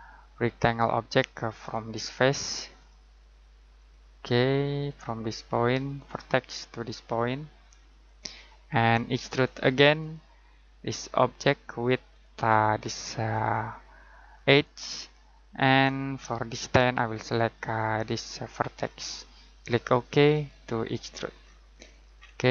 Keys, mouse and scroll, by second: 1.7 click, 21.2 scroll down 1, 21.4-22.5 scroll up 1.